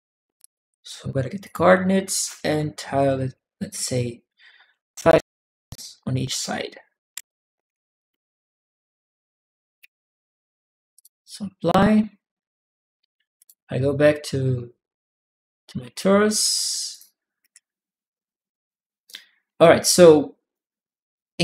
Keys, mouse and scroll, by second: 0.1 click, 1.2 click, 4.6 Tab, 10.7 click, 13.2 click, 16.7 click, 17.2 middle click, 18.8-20.3 right drag, 19.3 a.